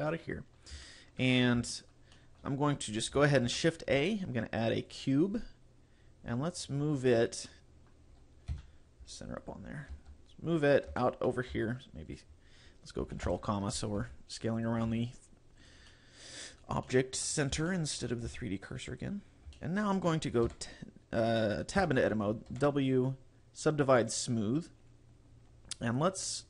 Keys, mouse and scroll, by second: 0.2 middle click, 0.9 shift+middle click, 1.4-1.8 scroll up 4, 1.8 shift+middle click, 2.2 shift+middle click, 3.6 shift+a, 5.6-6.0 scroll down 1, 6.6 click, 7.5 middle click, 8.6 KP_Decimal, 9.1-9.7 scroll down 7, 10.0 g, 10.8 click, 11.0 shift+middle click, 11.6 s, 12.2 right click, 13.3 ctrl+,, 14.0 g, 14.7 click, 14.9 s, 15.8 click, 16.0 middle click, 16.6 scroll up 3, 16.9 shift+middle click, 17.4 scroll up 2, 17.8 shift+middle click, 18.3 g, 19.0 click, 19.2 scroll up 3, 19.6 shift+middle click, 20.5 w, 21.9 Tab, 22.7 w, 25.5-25.9 scroll down 4.